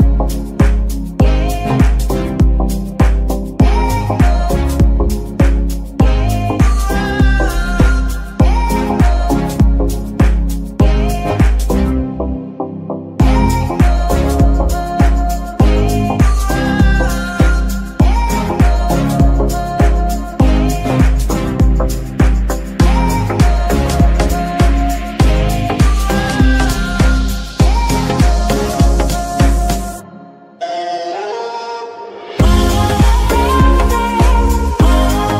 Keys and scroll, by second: 3.1 KP_7, 4.1 g, 5.1 r, 7.4 s, 10.5 KP_1, 11.5 g, 11.5 z, 13.3 shift+g, 20.7 KP_3, 23.6 Tab, 26.1 g, 26.6 y, 32.4 z.